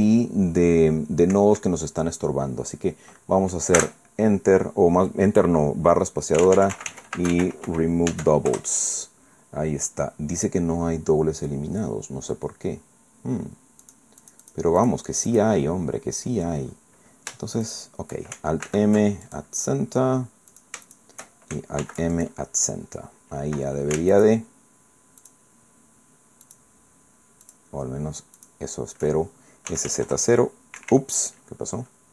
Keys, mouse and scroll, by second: 1.3 Escape, 3.8 space, 6.4-7.7 typing, 8.1 Caps_Lock, 8.5 Return, 11.0-11.3 scroll down 2, 11.4-11.7 scroll up 2, 13.9 click, 14.2 click, 14.8 click, 14.9 right click, 15.3 right click, 17.7 shift+right click, 19.3 alt+click, 20.5 shift+right click, 21.8 alt+m, 22.1 alt+click, 24.1 alt+shift+right click, 25.2 alt+shift+right click, 26.5 alt+shift+right click, 27.5 alt+shift+right click, 28.4 alt+shift+right click, 29.7 s, 29.9 z, 30.1 KP_0, 30.8 Escape, 31.5-32.1 scroll down 4.